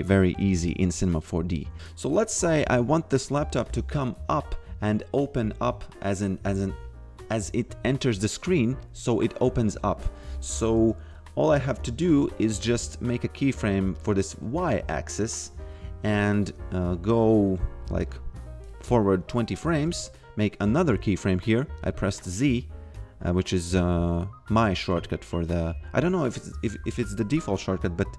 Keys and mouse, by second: 3.2 click, 11.5 f, 12.1 shift+a, 13.9 click, 16.4 f, 18.1 click, 19.8 z.